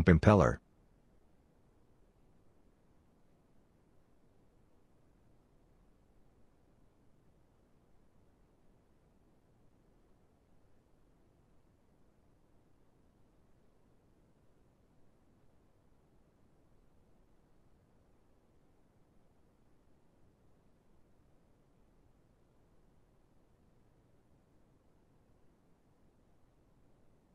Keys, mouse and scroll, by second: 0.1 right click, 13.2 middle click, 20.5 middle click.